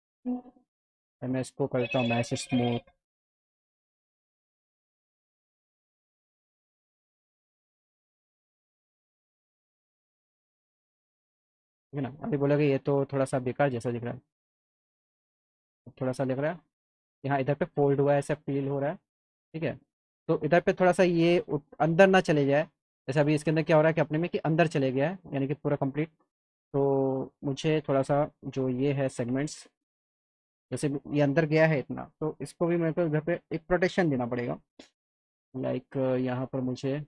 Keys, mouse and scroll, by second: 1.5 click, 7.5 click, 9.9-11.1 alt+middle drag, 11.4 middle click, 13.4 click, 14.4 click, 15.0 alt+middle click, 16.3 click, 18.1-19.7 alt+middle drag, 21.7 F3, 22.3 click, 23.7 click, 25.1 click, 25.8 click, 26.4 click, 29.1-29.8 scroll up 2, 29.8 middle click, 30.3 alt+middle click, 33.9 click, 35.1 click, 36.2 click, 36.5 right click.